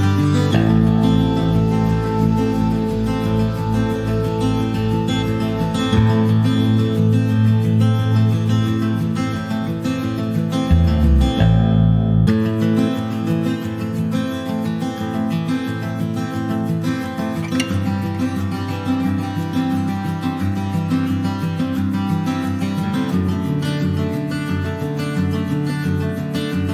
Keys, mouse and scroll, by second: 0.0 click, 0.3-0.6 scroll down 1, 0.6 shift+middle click, 1.4 click, 1.9 click, 3.2 shift+middle click, 3.5 shift+scroll up 1, 3.7 middle click, 4.6 scroll up 1, 4.7 scroll down 2, 5.1 middle click, 5.6-6.4 scroll up 1, 6.4-7.0 scroll up 1, 7.4 click, 7.9 click, 9.1-10.1 drag, 11.1 click, 12.0-12.5 scroll up 2, 12.3 middle click, 12.6 click, 13.2 click, 15.9 click, 16.3 middle click, 16.5 scroll up 1, 16.7 shift+middle click, 16.9 click, 17.2 middle click, 17.9-18.2 scroll up 2, 18.2 click, 19.3 click, 20.5 click, 21.9 click, 23.6 shift+middle click, 24.0 scroll down 2, 24.2-26.3 middle drag, 26.3 click.